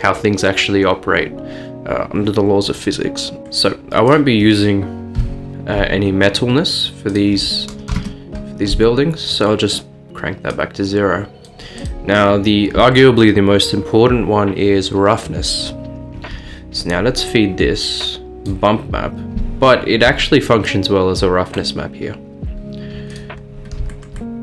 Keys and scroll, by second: 3.4 Return, 3.4 typing, 5.2 Delete, 7.9 0, 8.0 Return.